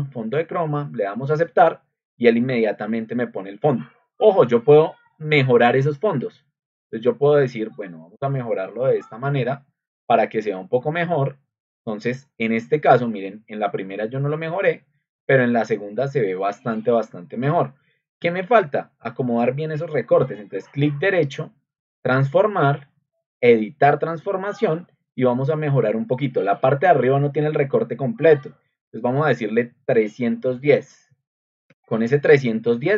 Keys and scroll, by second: 30.4 1, 31.6 0.